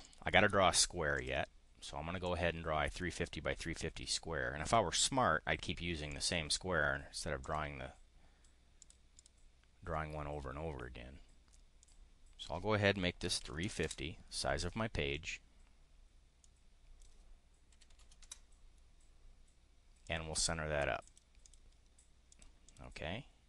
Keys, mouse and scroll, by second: 0.0 click, 1.1 click, 2.2-4.8 drag, 6.0 click, 7.4 click, 8.7 click, 9.0 click, 11.8 click, 12.9-14.0 typing, 16.4 click, 17.5-18.5 typing, 20.0 click, 21.0 click, 21.4 click, 22.2 click, 22.5 click.